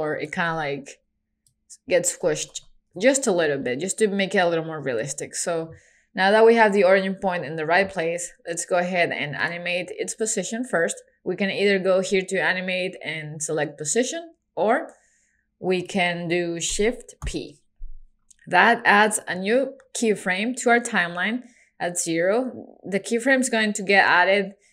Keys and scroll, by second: 0.5 super+z, 2.5 super+a, 3.0 super+z, 17.3 shift+p.